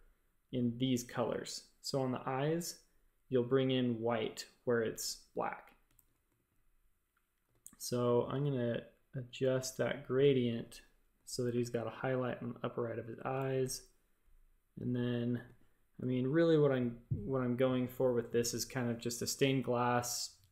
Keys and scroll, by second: 1.8 typing, 5.9 shift+super+a, 7.1-7.9 typing, 11.1 a, 11.5 g, 13.3 shift+super+a, 15.4 space, 15.9 space.